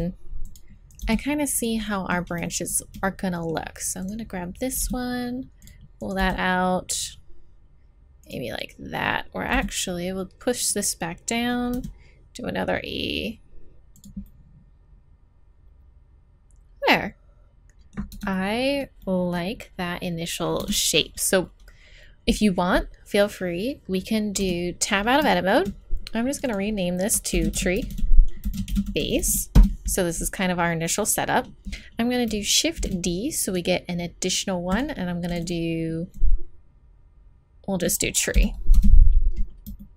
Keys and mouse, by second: 1.0 g, 4.0 right click, 4.8 g, 6.0 right click, 6.2 g, 9.5 g, 11.7 e, 14.2 click, 18.1 Tab, 18.3-22.7 middle drag, 20.6 Tab, 24.4 Tab, 25.3 click, 26.3 middle click, 26.9 click, 27.9 e, 32.8 shift+d.